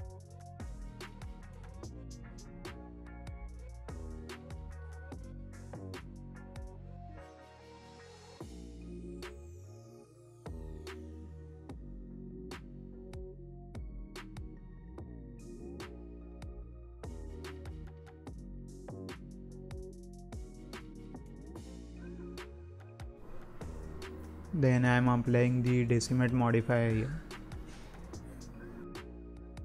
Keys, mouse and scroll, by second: 1.2-1.5 scroll down 1, 1.5-2.0 scroll up 1, 2.0-3.1 drag, 3.9 click, 6.5-8.4 shift+drag, 8.4 x, 11.6 scroll down 4, 11.8-12.2 scroll up 1, 12.2 middle click, 13.1-13.5 scroll up 4, 13.5 scroll down 2, 14.6 Tab, 15.0-15.5 scroll down 1, 15.5 alt+a, 15.7-16.7 scroll up 3, 16.7 click, 17.1 shift+middle click, 17.3 scroll up 1, 17.6 middle click, 18.2-18.6 scroll up 1, 18.6 z, 19.9 shift+middle click, 20.2-20.5 scroll up 2, 20.5 middle click, 20.9-22.0 scroll down 2, 21.3 click, 22.0 scroll up 1, 23.1-25.0 drag, 26.9-29.6 drag.